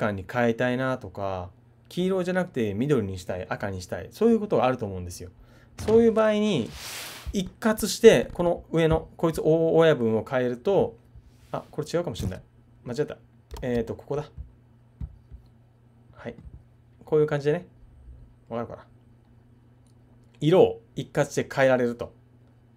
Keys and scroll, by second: 13.7 super+z.